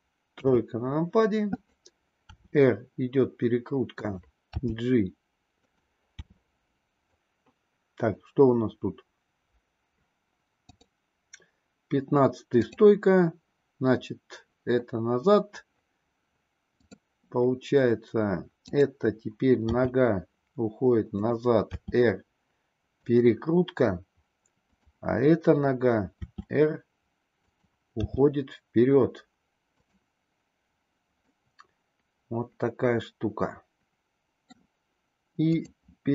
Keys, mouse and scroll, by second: 0.1 KP_3, 1.4-2.0 drag, 2.3 r, 4.5 g, 6.1 r, 10.6 click, 12.5 click, 16.7 click, 18.6 click, 19.7 g, 21.6 r, 26.1 r, 28.0 g, 31.2-34.6 middle drag, 35.5 click.